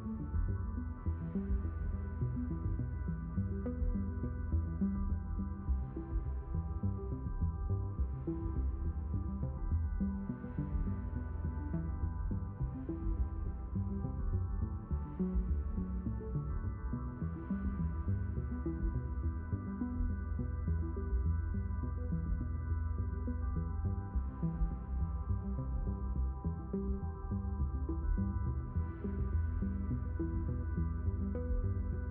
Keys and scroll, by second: 22.2 s, 22.5 Return.